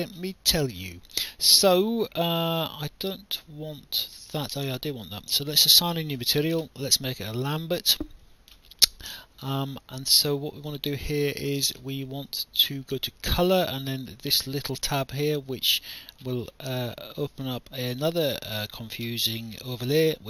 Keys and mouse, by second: 0.8 right click, 7.3 click, 15.6 click, 18.5 click.